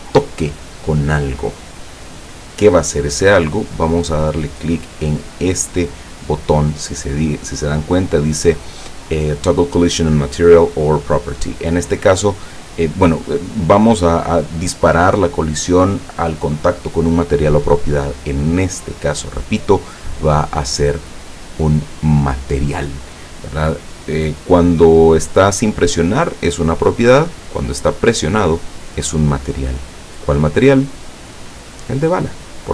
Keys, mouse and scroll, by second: 21.1 click, 23.9 click, 27.9 click, 30.6 click, 32.1 click.